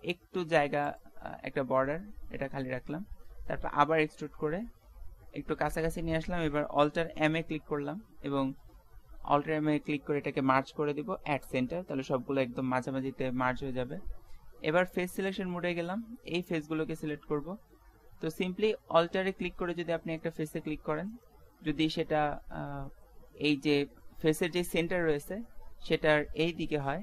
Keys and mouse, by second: 1.3 middle click, 3.6 e, 7.2 alt+m, 13.4 middle click, 15.2-16.5 drag, 16.5 middle click, 16.8 click, 16.8 right click, 17.0-18.9 middle drag, 20.2-22.1 middle drag, 22.0 click, 22.4 middle click, 22.8-24.4 middle drag.